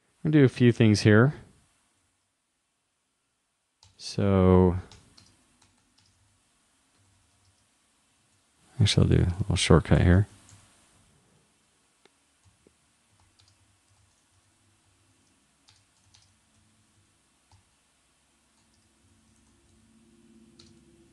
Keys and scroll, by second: 2.0 super+Right, 6.3 shift+', 13.7 shift+[, 14.0 shift+;, 16.1 shift+., 19.1 shift+;.